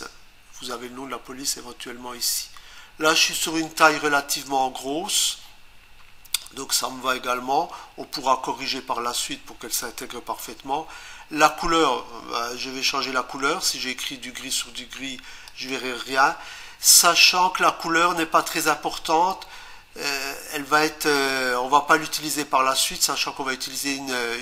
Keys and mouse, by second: 15.5 click, 21.9 click.